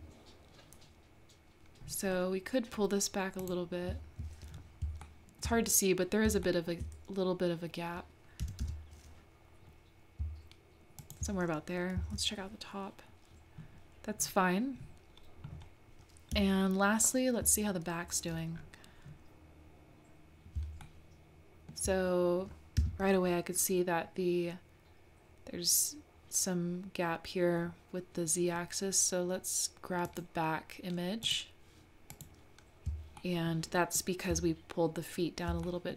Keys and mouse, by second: 5.1 shift+middle click, 6.4 shift+click, 8.4 g, 12.0 click, 20.8-21.8 shift+middle drag, 22.8 Tab, 30.1 click, 31.2 click, 32.2 click, 33.2 shift+middle click, 33.8-34.1 shift+middle drag, 35.6 shift+middle click.